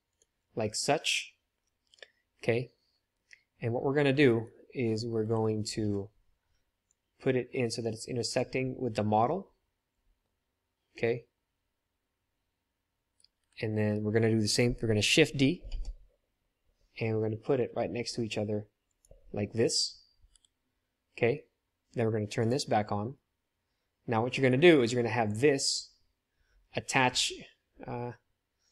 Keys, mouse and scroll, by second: 4.5-5.1 middle drag, 5.1 click, 5.1 KP_7, 6.5 middle click, 7.0-12.5 drag, 13.3 KP_7, 15.7 shift+d, 18.7 click, 19.0-20.3 middle drag, 20.3 KP_3, 22.4 click, 24.5 middle click, 25.2 click, 28.6-28.7 drag.